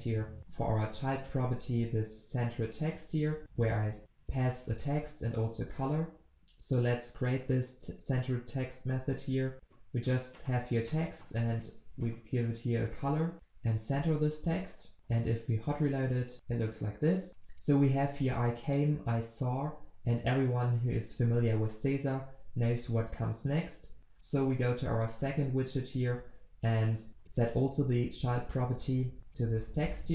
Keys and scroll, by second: 6.3 ctrl+v, 15.3 ctrl+s, 28.9 ctrl+v, 30.0 ctrl+s.